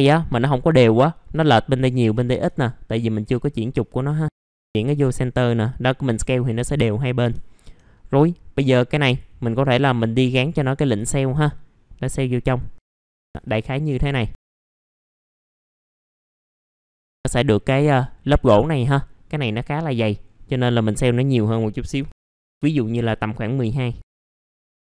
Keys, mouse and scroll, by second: 3.0-7.3 drag, 7.5 alt+middle click, 8.0-8.8 scroll up 1, 9.0-13.3 drag, 13.4 alt+middle click, 13.9 right click, 14.5 click, 14.9 alt+middle click, 15.4 F4, 15.9 scroll down 1, 16.2 alt+middle click, 16.7-17.1 scroll down 1, 17.1 middle click, 17.9-18.6 scroll up 1, 18.9 middle click, 20.2-21.3 scroll up 1, 21.3 click, 24.2 middle click.